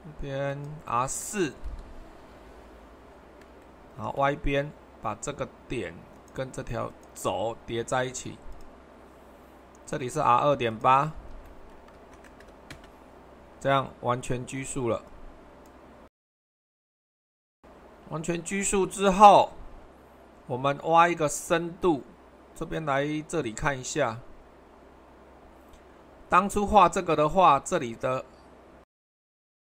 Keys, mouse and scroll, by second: 2.3 typing, 2.3 Return, 12.6 typing, 12.7 Return, 18.9 super+1, 22.2-23.9 scroll up 1, 26.8-28.5 middle drag.